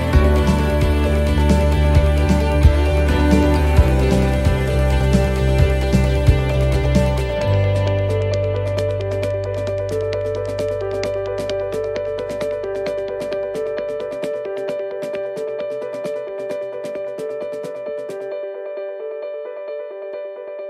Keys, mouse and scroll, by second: 0.2 right click, 1.3 click, 4.1 click, 8.3 click, 9.9 middle click, 10.4 shift+scroll up 1, 10.7 shift+middle click, 11.2 middle click, 11.7 shift+middle click, 12.2-12.5 scroll up 1, 12.7 shift+middle click, 15.6 scroll down 2, 16.0 shift+middle click, 16.6 scroll up 2, 17.1 right click, 18.1 right click, 18.3-18.8 scroll down 5, 19.6 shift+d.